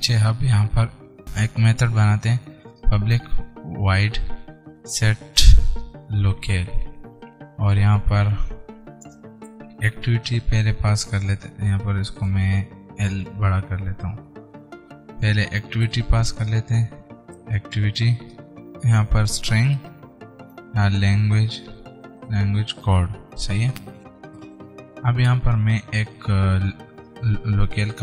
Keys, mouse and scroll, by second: 1.9-7.8 typing, 8.2 Right, 9.1 shift+[, 9.3 Return, 11.6 click, 12.1 Left, 13.3 shift+l, 14.3 ctrl+Right, 15.8 shift+a, 16.1 c, 16.8 Return, 17.5-23.8 typing, 20.1 Return, 24.0 alt+Tab, 24.8 Return, 26.1 Up.